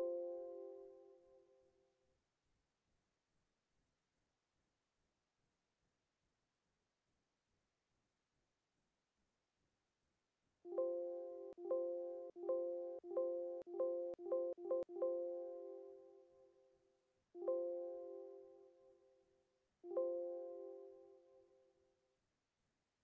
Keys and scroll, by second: 2.2 Delete.